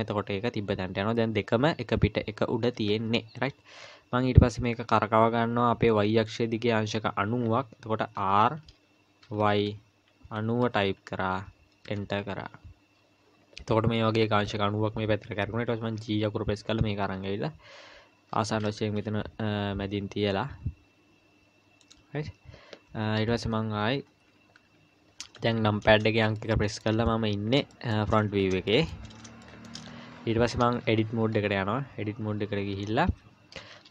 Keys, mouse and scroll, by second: 0.1-3.1 scroll down 1, 8.2 r, 16.0 g, 24.0-24.6 scroll up 2, 24.6 KP_1, 25.2-26.0 scroll up 2, 26.4 shift+middle click, 27.2-27.6 scroll up 2, 27.7 shift+middle click, 28.1-29.2 scroll up 6, 28.7 shift+middle click, 29.4 shift+middle click, 29.9-30.6 scroll up 2, 30.9 Tab, 31.3-31.9 scroll down 2, 31.9 scroll up 2, 32.4 a, 32.7 a, 33.1 a.